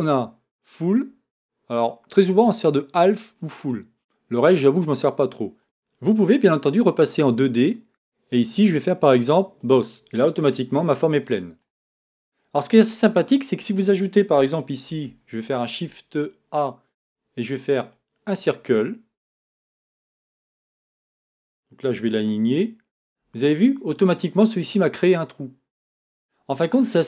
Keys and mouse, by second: 14.8 shift+a, 23.9 click.